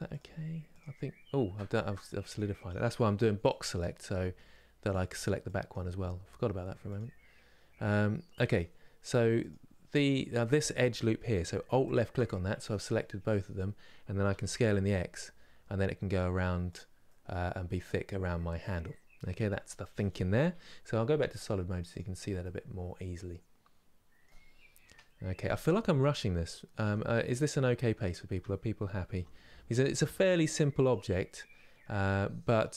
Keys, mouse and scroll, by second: 1.4 ctrl+z, 2.0 click, 3.4 click, 3.7 g, 5.3 click, 5.5 g, 8.2 click, 9.1 click, 11.5 alt+click, 11.9-14.0 middle drag, 14.0 s, 16.8-20.7 middle drag, 21.5 click, 22.1-24.5 middle drag, 24.5 KP_7, 26.5 g.